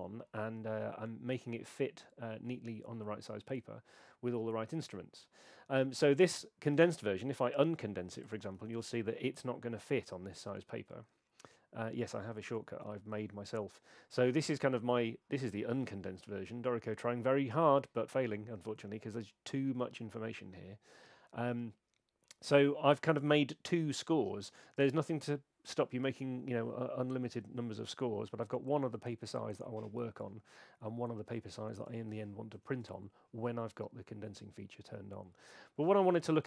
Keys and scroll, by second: 8.6 shift+super+c, 32.5 shift+super+c.